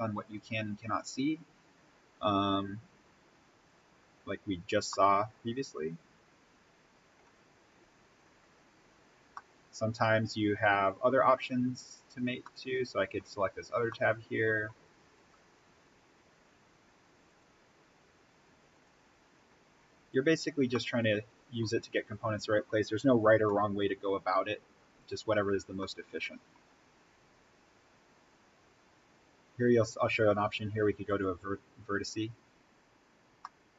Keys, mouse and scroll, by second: 1.2-2.4 scroll down 1, 3.6 click, 4.2 scroll up 1, 4.8-7.3 middle drag, 7.3-7.9 scroll up 1, 9.3-11.3 middle drag, 11.3 scroll up 1, 12.4-14.9 middle drag, 14.9-15.2 scroll down 1, 17.2 click, 19.3-20.6 scroll up 1, 20.6-23.3 middle drag, 23.3 scroll down 1, 23.4-24.9 middle drag, 24.9 click, 25.7 middle click, 26.7-29.9 scroll down 1, 31.0 click, 32.0 scroll up 1, 33.3-33.7 middle drag.